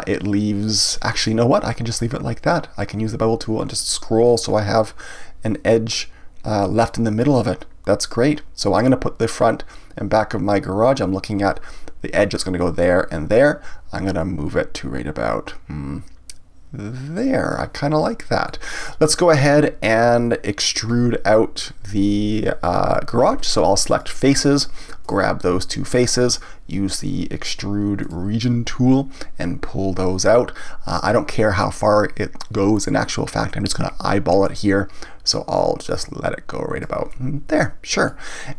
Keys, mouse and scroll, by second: 17.5 click, 18.5-21.5 middle drag, 23.9 click, 25.0 click, 25.8 shift+click, 28.0 click, 29.4-32.4 drag, 37.1-38.5 middle drag.